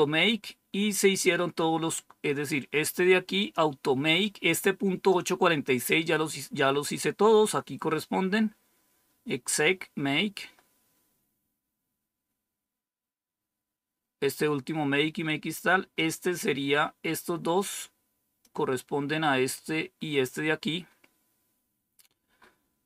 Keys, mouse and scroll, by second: 3.3 click, 10.7-11.5 scroll down 2, 15.9-18.4 drag, 19.4 click, 20.1 click, 20.5-22.7 scroll down 4.